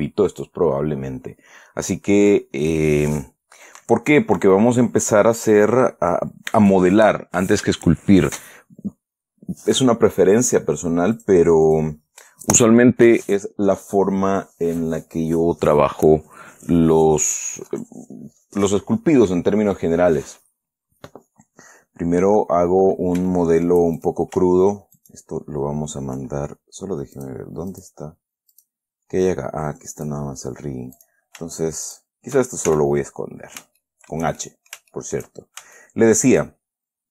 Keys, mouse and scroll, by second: 11.5 click, 12.0 click, 22.5-23.2 scroll down 4, 23.6 shift+middle click, 24.3 shift+click, 25.3 shift+right click, 27.5 click, 28.1 click, 28.9 click, 30.3 click, 31.3 click, 32.2 shift+right click, 33.0 shift+h, 33.5-34.1 shift+scroll up 3, 34.1 shift+middle click, 34.7 shift+middle click, 36.0 shift+scroll up 1, 36.1 shift+middle click.